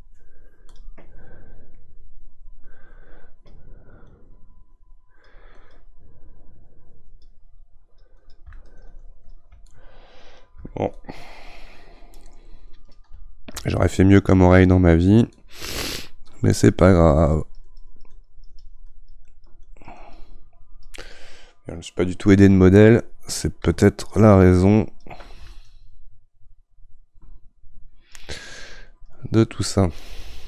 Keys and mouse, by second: 9.6-10.9 middle drag, 10.9-13.7 shift+drag, 13.7-15.3 shift+middle drag, 15.3-21.1 shift+drag, 21.1-24.1 middle drag, 24.1-30.4 ctrl+drag.